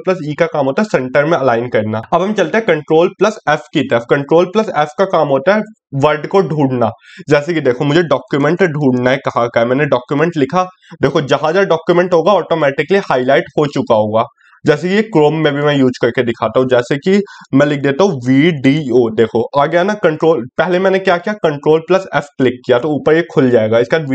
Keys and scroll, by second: 2.4 ctrl+f.